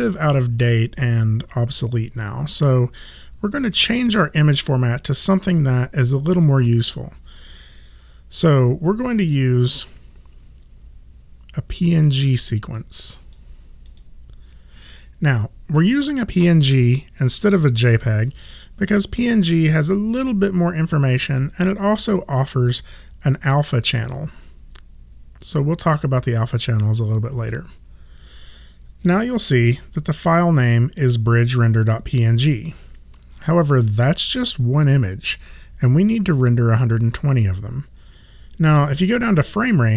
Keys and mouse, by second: 8.5 click, 13.9 click.